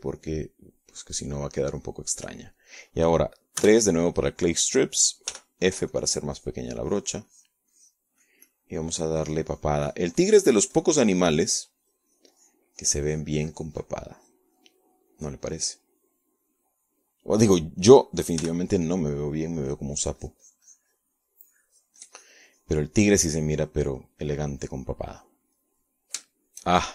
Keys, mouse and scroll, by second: 0.2 click, 1.2 click, 2.0-4.7 middle drag, 5.3 3, 5.5 click, 7.0 f, 7.6 click, 8.0 click, 16.7 click, 18.6 middle click, 20.1 f, 20.8 click, 21.3-24.8 drag, 25.6 middle click, 25.9 middle click.